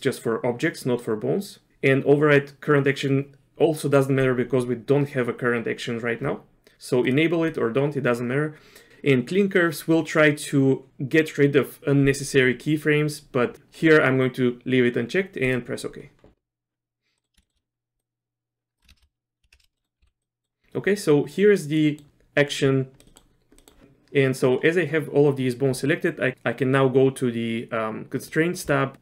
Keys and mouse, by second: 17.2 middle click, 17.4 shift+middle click, 18.0 click, 18.9 shift+space, 19.5 shift+space, 19.8 middle click, 20.0 z, 20.2 middle click, 21.8 middle click, 23.0 middle click, 23.0 z, 23.1 middle click, 23.6 middle click, 28.3 click.